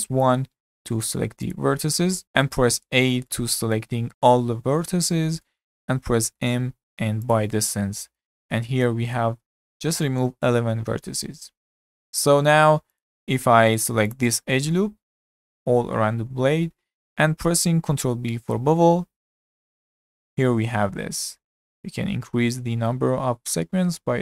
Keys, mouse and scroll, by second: 1.5 click, 2.2-2.8 middle drag, 2.8 a, 3.3-5.3 shift+middle drag, 5.3-5.6 scroll up 2, 5.6 shift+middle click, 6.4 m, 13.0 click, 13.4 2, 14.1 alt+click, 14.5 scroll down 3, 14.8-16.9 middle drag, 16.9-17.3 scroll up 5, 17.3 shift+middle click, 18.0 ctrl+b.